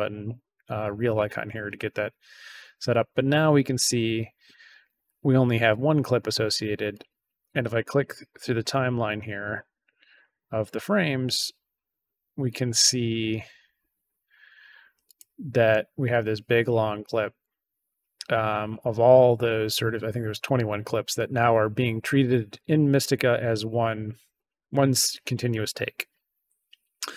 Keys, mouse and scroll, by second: 3.5 click, 6.8 click, 7.8 click, 8.7 click, 10.0 click, 12.4 click, 15.0 click, 16.9 click, 18.6 click, 24.3 click.